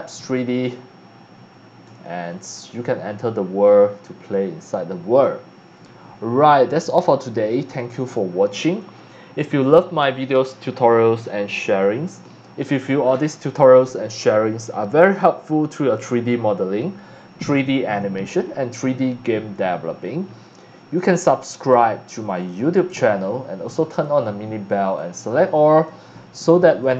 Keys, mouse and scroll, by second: 6.3 Escape, 7.8 click, 22.5 click, 23.9 click, 24.7 click, 25.6 Escape, 26.8 click.